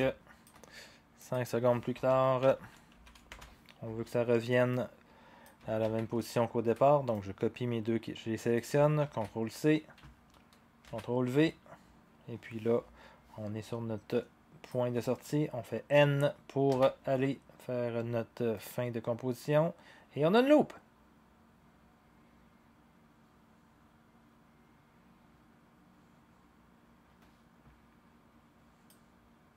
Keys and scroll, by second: 2.1-2.9 typing, 3.3 Return, 5.8 ctrl+c, 9.0 ctrl+c, 10.8 ctrl+v, 16.7 n.